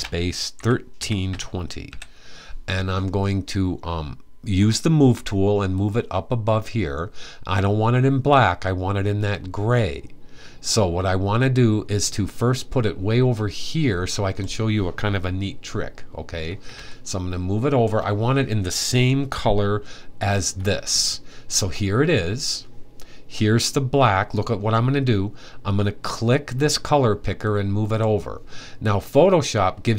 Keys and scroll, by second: 0.0-1.5 typing.